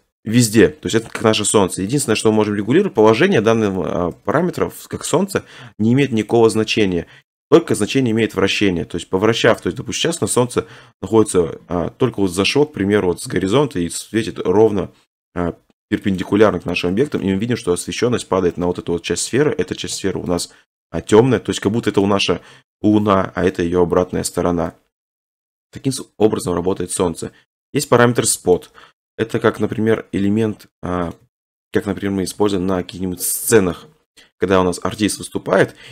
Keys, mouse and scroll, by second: 1.7 scroll, 3.0 7, 4.2 g, 6.3-8.5 ctrl+drag, 6.6 ctrl+z, 7.5 3, 8.1 r, 16.2 click, 16.9 shift+middle click, 16.9 scroll, 18.3 middle click, 19.5-19.9 scroll, 20.4 shift+middle click, 20.6 shift+middle click, 20.7 middle click, 21.7 middle click, 23.6 middle click, 24.4 middle click, 24.5 scroll, 25.8 middle click, 27.8 click, 29.3 scroll, 30.9-31.2 scroll down 7, 31.7 shift+middle click, 32.4 1, 33.4 3, 35.0 r.